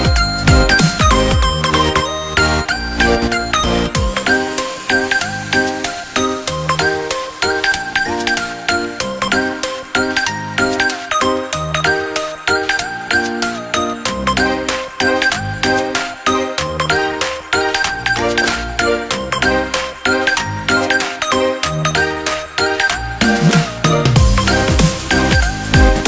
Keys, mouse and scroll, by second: 0.7-3.2 middle drag, 4.3-6.3 drag, 6.5-11.6 middle drag, 12.0 scroll up 1, 13.3 Tab, 14.3 click, 15.1 ctrl+l, 16.1 x, 17.7-18.3 scroll down 1, 18.3-20.0 middle drag, 20.0 Tab, 20.5-20.9 scroll down 2, 20.9-22.1 middle drag, 22.1 click, 23.7-26.0 drag.